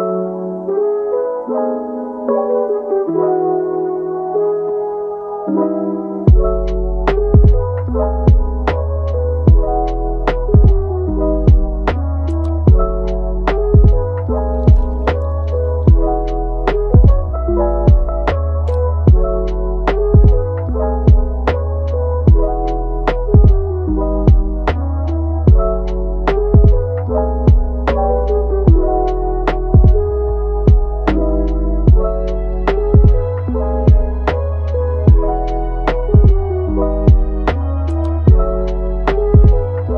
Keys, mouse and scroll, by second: 0.9 click, 1.6 g, 2.6-3.6 middle drag, 3.6 g, 4.3-5.4 middle drag, 5.4 click, 6.0 click, 6.4 g, 7.5 click, 7.8 g, 9.2 click, 9.7 g, 10.9 scroll down 1, 11.2 Tab, 11.6-12.7 middle drag, 12.7 scroll up 1, 12.8-13.5 middle drag, 13.5 Tab, 13.8 middle click, 14.3 Tab, 14.7-15.4 middle drag, 15.4 click, 15.8-17.1 middle drag, 17.1 shift+d, 17.9 r, 21.3-24.4 middle drag, 24.5-27.5 middle drag, 31.3 Tab, 32.2 g, 33.3-36.4 middle drag, 36.4 g, 38.8 middle click, 39.5 g.